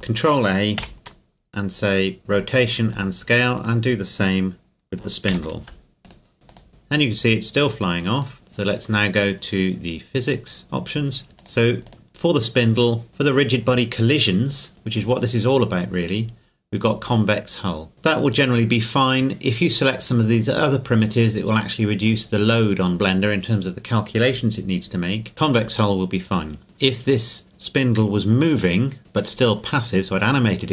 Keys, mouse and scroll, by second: 0.8 ctrl+a, 2.9 click, 3.6 right click, 5.3 ctrl+a, 6.0 click, 10.3-11.3 drag, 11.4-13.6 right drag, 17.1 click, 25.3 click.